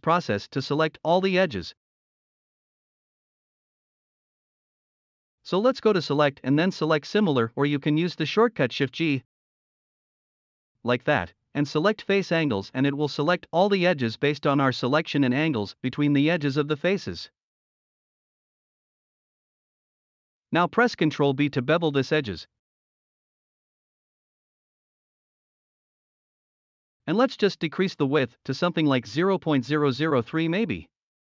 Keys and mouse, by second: 1.6-2.1 middle drag, 2.5 middle click, 3.0 middle click, 3.7 middle click, 4.2 middle click, 6.4-10.2 drag, 11.2 shift+g, 13.2-13.6 middle drag, 14.1-14.5 middle drag, 15.1 middle click, 15.7 shift+d, 16.2 click, 17.0 click, 17.3 click, 18.1 click, 18.4 ctrl+z, 18.5 middle click, 18.9 middle click, 19.2-19.7 middle drag, 21.0 ctrl+b, 24.2 shift+click, 28.6-31.2 drag.